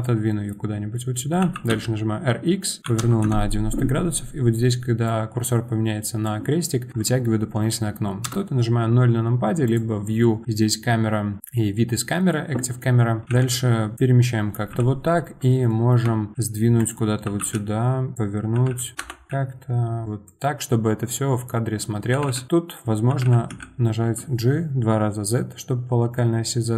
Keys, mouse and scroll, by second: 0.3 middle drag, 0.5-0.9 scroll down 2, 0.9-3.2 middle drag, 3.2 r, 5.0-8.2 drag, 8.2 KP_0, 9.7-13.2 drag, 13.2 g, 14.8 KP_7, 16.3 g, 17.2 r, 18.6 g, 19.3 g, 22.2 g.